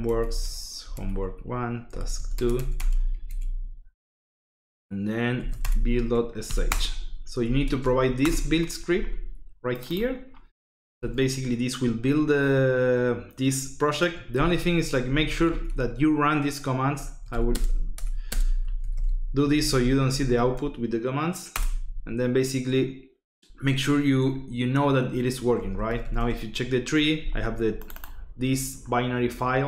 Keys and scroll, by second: 0.0-3.1 typing, 0.2 Tab, 2.7 Tab, 3.3 Tab, 5.1-8.4 typing, 6.6 Return, 14.3-20.7 typing, 21.5 Return, 25.3-26.4 typing.